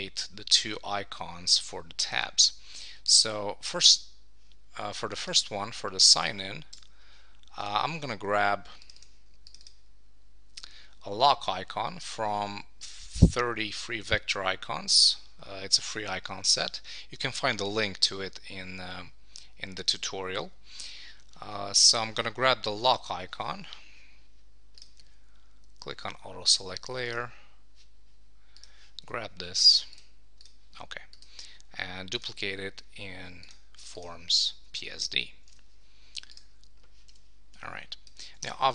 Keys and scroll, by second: 34.7 Return, 35.7 super+w, 38.4 Return.